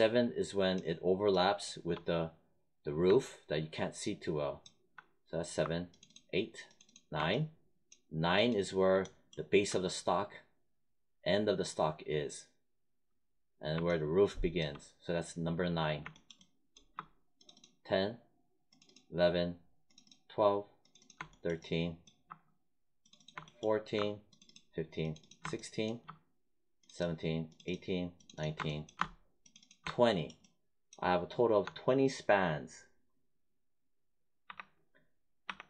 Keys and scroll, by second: 34.4 1.